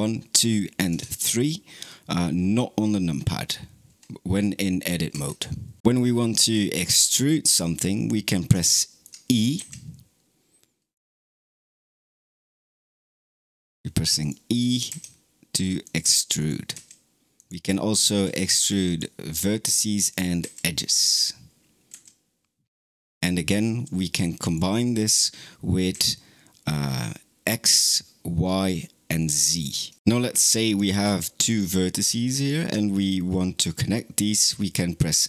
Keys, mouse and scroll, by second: 0.8 Tab, 8.5 shift+middle click, 9.4 e, 12.0 click, 12.7 e, 14.5 click, 14.7 e, 16.2 click, 16.6 e, 18.1 1, 18.7 click, 20.2 e, 24.3 click, 25.8 e, 30.5 click, 31.3 click, 32.2 shift+click.